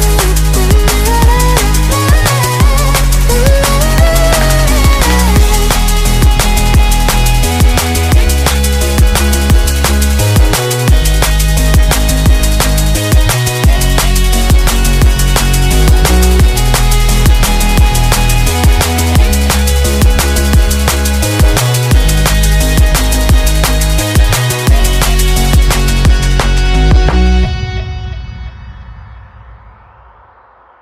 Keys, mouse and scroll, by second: 0.0-16.0 drag, 16.0-25.3 middle drag, 16.0 r, 25.3-30.8 drag.